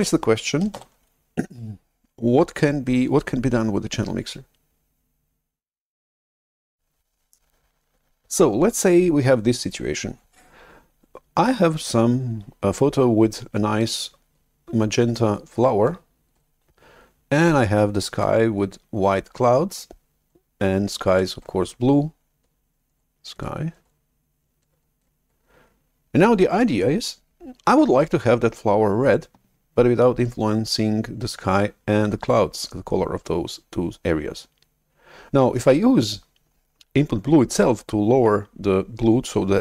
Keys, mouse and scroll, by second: 0.8 shift+super+F11.